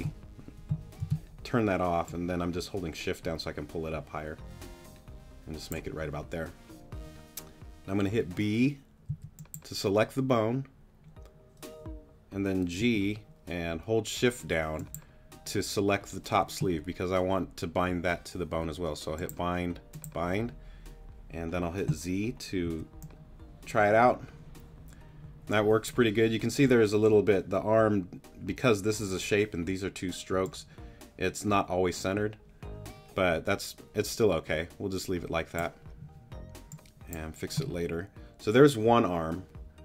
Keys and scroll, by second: 2.0 super+g, 9.1 b, 12.8 g, 13.6 shift+g, 22.6 z.